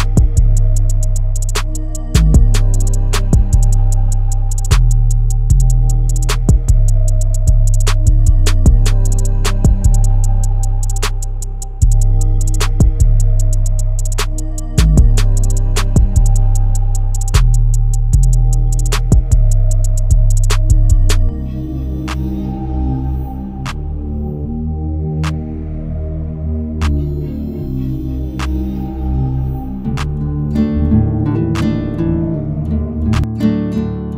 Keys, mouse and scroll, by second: 0.0 scroll down 1, 4.2 click, 4.9 scroll up 1, 8.3-15.7 drag, 15.7-22.2 drag, 22.2 scroll up 1, 24.0 scroll down 1, 25.7-27.3 drag, 27.3 ctrl+q, 30.3 ctrl+q, 31.3 click.